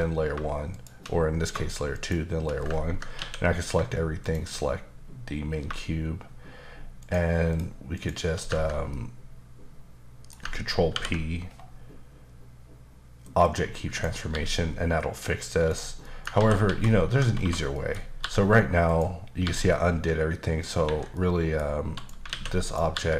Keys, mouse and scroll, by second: 0.7 shift+click, 1.9 shift+click, 3.2 a, 4.2 shift+click, 7.0 shift+double click, 7.5 shift+click, 8.0 shift+click, 8.9 middle click, 10.9 ctrl+p, 13.4 click, 13.9 click, 14.3 g, 15.7 right click, 16.0 middle click, 16.4 ctrl+z, 16.6 ctrl+z, 17.4 1, 17.7 middle click, 18.2 g, 18.9 click, 19.4 g, 20.8 Escape, 21.1 middle click, 21.9 click, 22.3 alt+a, 22.6 click, 22.9 g.